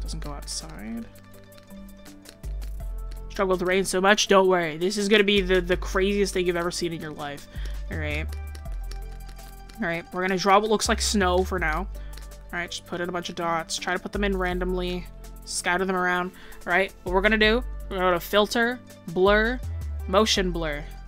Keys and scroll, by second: 13.7 ctrl+z.